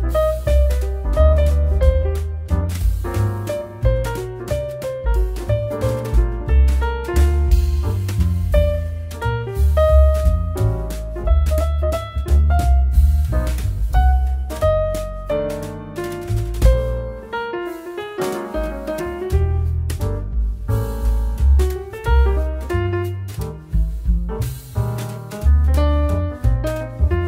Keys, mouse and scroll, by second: 0.1-1.5 drag, 1.5 0, 5.6-9.1 drag, 9.4-10.1 scroll down 3, 10.1 click, 10.8-11.4 scroll down 3, 11.4-13.5 drag, 15.7 click, 16.9 scroll down 3, 17.1 middle click, 17.3 scroll up 3, 17.6 click, 18.3 x, 19.7 shift+a, 21.1 s, 24.0 click, 24.4 click, 25.2 click, 25.4-26.0 scroll down 7, 26.0 s.